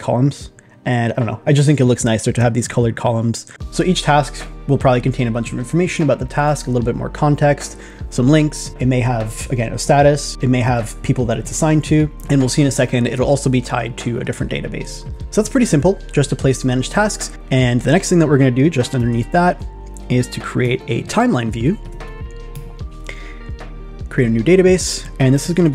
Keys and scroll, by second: 15.0 super+Tab, 15.2 super+`, 25.6 shift+p.